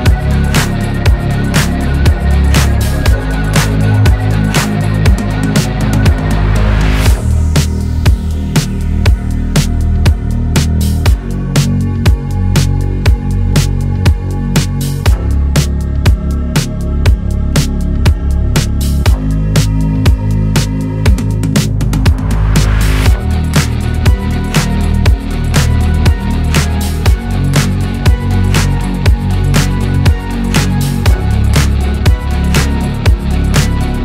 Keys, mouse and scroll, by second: 0.0-2.9 typing, 4.0 ., 6.4 space, 6.6 2, 7.8 shift+5, 15.4 space, 17.0-18.2 typing, 19.6-20.8 typing, 26.4 shift+space, 27.0 shift+9, 28.2-29.3 typing, 30.4-32.2 typing.